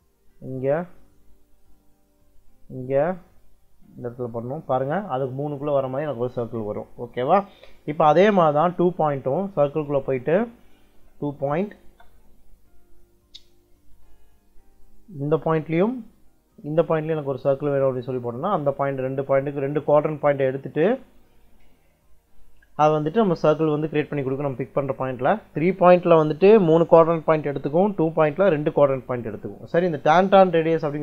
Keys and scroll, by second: 9.5 c, 9.8 space, 10.8 2, 11.7 space, 29.4 Escape, 30.8 c.